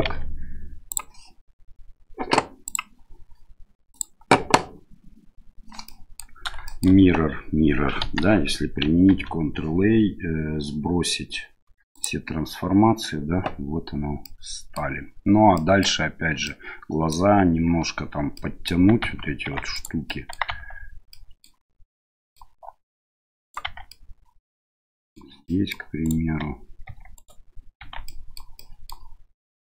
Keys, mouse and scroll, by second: 0.0 q, 2.6-4.0 drag, 5.8-6.2 middle drag, 6.6 shift+middle drag, 8.0 KP_1, 9.1 ctrl+a, 14.2-14.8 middle drag, 15.5-15.9 middle drag, 16.4 scroll up 1, 16.5-17.1 middle drag, 17.1 scroll down 1, 18.3 scroll up 1, 18.4-18.7 middle drag, 19.0 Tab, 19.4 Tab, 19.7 right click, 20.0 middle click, 20.5 Tab, 21.1 middle click, 21.9 middle click, 23.0 right click, 23.6 Tab, 23.9-25.1 middle drag, 25.4 middle click, 26.0 right click, 26.4 Tab, 26.8 Tab, 27.1 right click, 27.8 Tab, 28.0 middle click, 28.6 middle click, 29.4 right click.